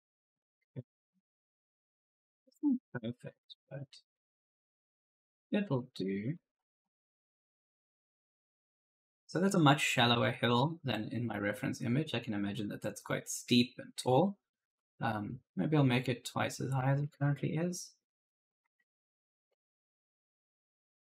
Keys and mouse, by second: 0.0-2.4 typing, 2.6 click, 4.0-7.0 typing, 4.2 right click, 10.3 alt+Tab, 13.9 alt+Tab, 14.3 right click, 14.5 a, 15.1 d, 15.6 s, 16.9 alt+Tab, 18.5 alt+Tab, 18.8-20.2 typing, 18.8 right click, 19.8 right click.